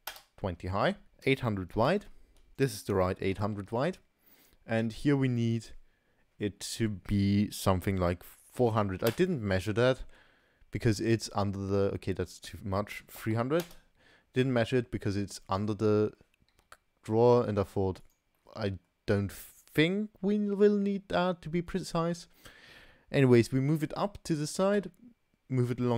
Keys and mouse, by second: 1.0-2.5 drag, 2.5-3.7 middle drag, 3.7-9.9 drag, 3.7 0, 8.8 0, 9.9-10.8 middle drag, 10.8 typing, 10.9-11.2 middle drag, 12.4-13.6 drag, 13.4 0, 13.6 middle click, 14.6-15.3 middle drag, 16.5 g, 18.4 middle click, 24.5 g.